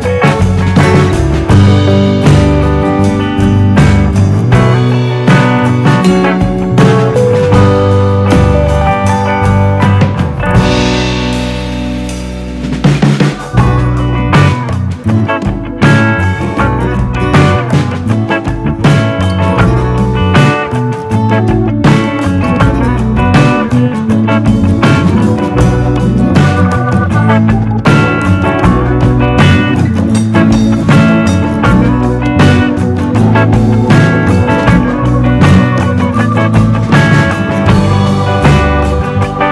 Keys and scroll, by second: 22.1 Right, 22.1 Right, 22.3 Right, 22.7 Right.